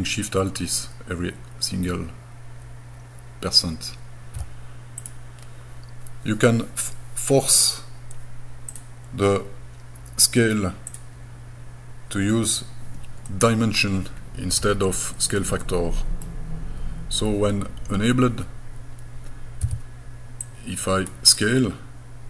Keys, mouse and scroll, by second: 5.0 click, 8.7-12.3 drag, 13.3 middle click, 14.2 scroll down 1, 14.6 scroll up 2, 15.7 middle click, 19.7 s, 20.5 click, 21.3 click.